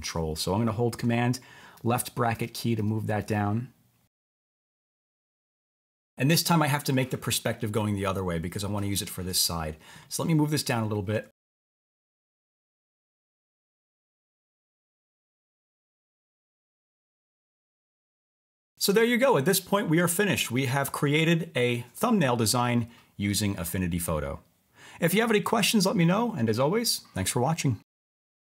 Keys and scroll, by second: 1.7 super+[, 2.3 super+[, 2.8 super+[, 4.8 BackSpace, 5.6 super+v.